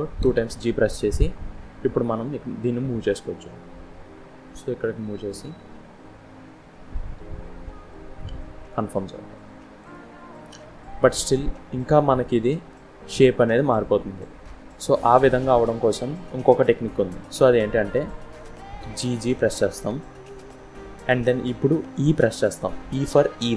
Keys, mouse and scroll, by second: 0.1 g, 10.7-13.8 scroll up 1, 14.1-17.2 scroll down 1, 18.7 g.